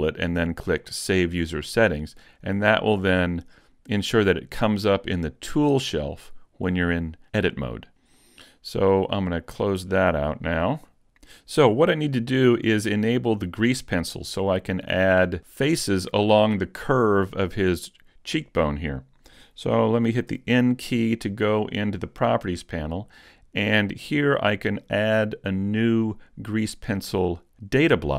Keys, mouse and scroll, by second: 20.3 n.